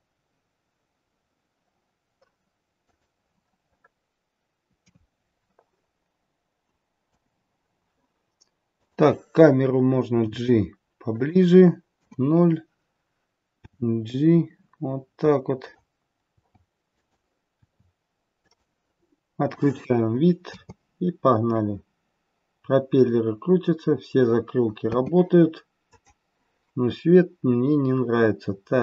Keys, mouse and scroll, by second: 3.2-4.3 scroll down 6, 4.8 KP_3, 5.3-6.0 scroll down 1, 6.0-7.0 scroll down 1, 7.0 KP_0, 7.5-8.5 scroll down 1, 8.7 click, 10.2 g, 11.9 KP_0, 13.6 g, 16.3 g, 19.4 click, 20.5 space, 24.9 space, 25.9 click.